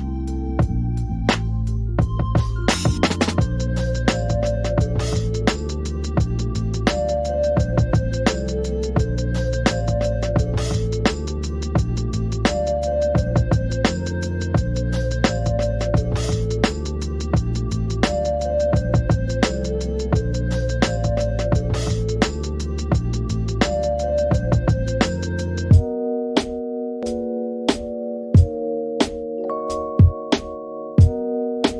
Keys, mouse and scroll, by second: 0.3 n, 0.5 scroll up 2, 0.6 middle click, 0.9 click, 1.1 alt+click, 1.3 shift+middle click, 1.5 Tab, 1.7 Tab, 1.8 Tab, 1.9 click, 2.1 Tab, 2.3 click, 2.4 Tab, 3.6 click, 4.6 g, 5.3 Tab, 5.4 click, 5.8-11.7 typing, 6.2 Tab, 6.3 click, 8.9 scroll down 1, 9.1-9.8 scroll up 4, 10.5 middle click, 11.3 middle click, 11.6 middle click, 11.8 middle click, 12.1 click, 12.5 alt+shift+click, 13.1 alt+shift+click, 13.3 ctrl+z, 13.4 shift+click, 13.7 right click, 14.1 middle click, 14.4 Tab, 14.6 click, 15.0 Tab, 15.1 ctrl+r, 15.7 ctrl+r, 16.0 Tab, 16.1 scroll down 2, 16.1 middle click, 16.2 right click, 16.4 middle click, 16.8 g, 17.1 shift+middle click, 17.4 scroll down 5, 17.6 click, 17.9 middle click, 18.2 KP_3, 18.6 click, 19.8 ctrl+r, 21.1 ctrl+r, 21.5 ctrl+r, 22.3 middle click, 22.8 ctrl+r, 23.4 middle click, 23.9 ctrl+r, 25.1 middle click, 25.4 ctrl+r, 26.2 middle click, 26.4 ctrl+z, 26.7 ctrl+z, 27.0 ctrl+r, 27.5 middle click, 27.9 ctrl+z, 28.0 ctrl+z, 28.2 ctrl+z, 28.3 ctrl+z, 28.5 ctrl+z, 28.7 ctrl+z, 29.1 click, 29.8 click, 30.1 click, 30.4 middle click, 30.9 click.